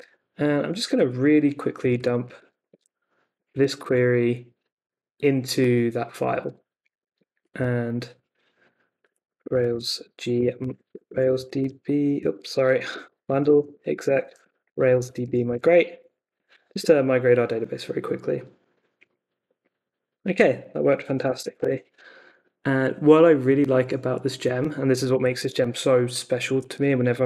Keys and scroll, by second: 1.9 super+a, 2.3 super+c, 2.6 super+Tab, 3.4 super+v, 3.8 super+s, 6.4 super+Tab, 8.7-17.2 typing, 20.7-22.0 typing, 24.9 super+c, 25.4 super+Tab, 26.9 super+t.